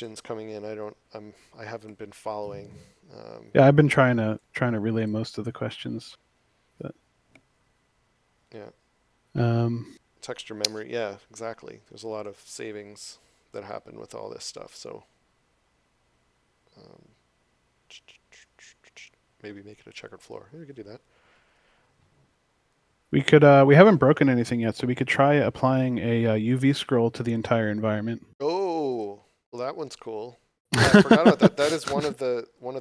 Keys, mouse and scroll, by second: 27.2 click.